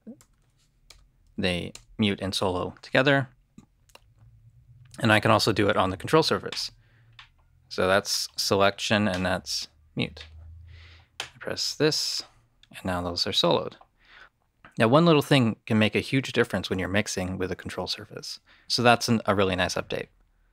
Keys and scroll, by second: 0.8 shift+m.